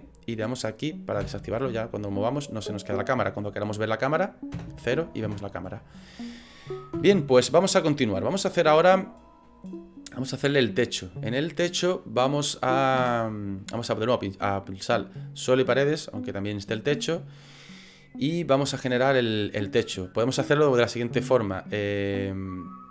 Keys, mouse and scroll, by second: 0.6 click, 1.2 n, 1.7 middle click, 2.6 middle click, 4.7 KP_0, 5.2 KP_0, 7.0 KP_0, 10.6 right click, 13.0 KP_0, 15.1 click, 19.1 middle click, 20.3 middle click, 21.0 right click, 21.9 middle click.